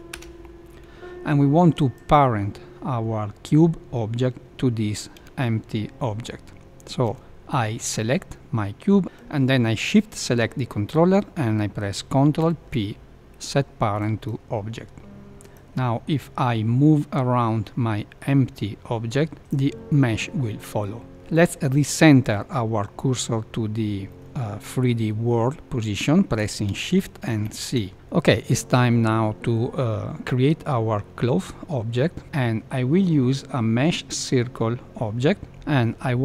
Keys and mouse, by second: 12.3 ctrl+p, 15.2 ctrl+p, 15.4 click, 16.5 g, 24.0 middle click, 27.4 shift+c.